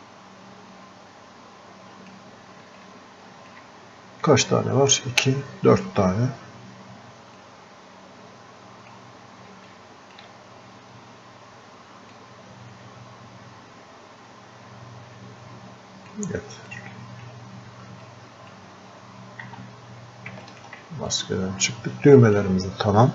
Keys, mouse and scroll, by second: 2.9-6.2 alt+drag, 7.4-9.7 drag, 9.7-12.1 alt+drag, 12.5-16.2 drag, 17.0 click, 18.4-19.5 drag, 19.5 f, 20.5 ctrl+click, 21.1-23.1 drag.